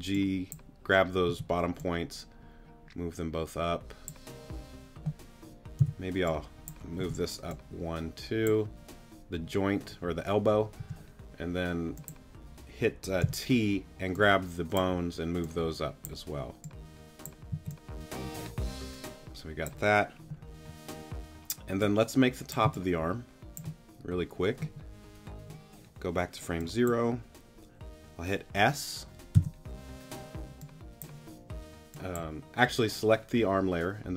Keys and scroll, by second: 1.3 t, 5.8 g, 7.0 t, 10.8 t, 13.2 t, 17.5 z, 22.6 space, 29.3 s.